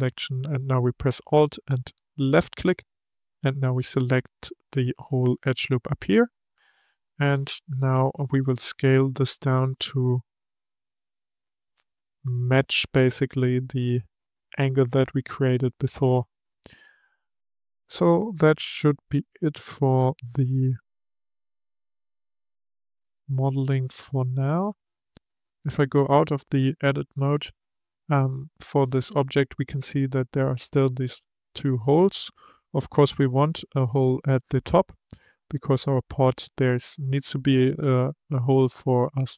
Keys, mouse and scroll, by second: 1.8 alt+click, 4.6-7.2 middle drag, 7.2 KP_3, 9.5 s, 21.1-21.5 scroll down 5, 24.7 Tab, 25.3-28.5 middle drag, 31.3-34.3 middle drag, 35.8-38.8 middle drag.